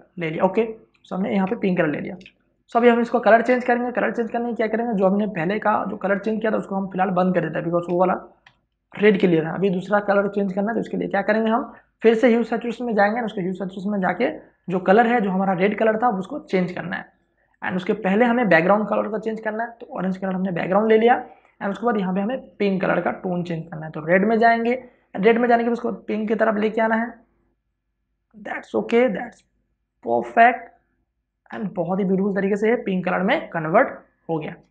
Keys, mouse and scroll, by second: 1.2 alt+BackSpace, 1.7 ctrl+d, 2.0 space, 2.3 click, 2.4 ctrl+click, 3.2 v, 3.7 click, 8.2 Delete, 11.2 ctrl+click, 12.2 click, 13.7 ctrl+space, 14.0 ctrl+click, 14.2 ctrl+space, 16.5 ctrl+click, 16.9 ctrl+space, 17.6 v, 18.0 click, 20.8 space, 21.0 ctrl+click, 21.6 v, 22.1-30.5 drag, 31.3 space, 32.2 ctrl+click.